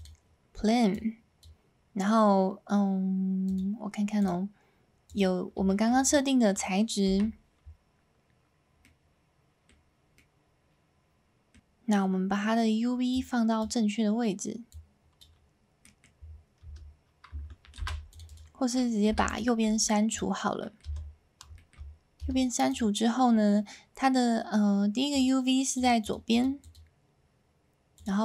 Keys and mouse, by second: 0.9 click, 3.5 click, 4.2-5.2 drag, 5.6 shift+middle drag, 8.8-9.7 middle drag, 10.3-11.5 middle drag, 13.1 click, 14.7 click, 15.8 middle click, 16.6 Tab, 18.3 right click, 19.1 3, 19.3 ctrl+click, 19.7 x, 20.6 ctrl+middle click, 21.0 Tab, 21.5 middle drag, 22.2 Tab, 22.7 click, 25.7 click, 26.0 click, 27.9 click.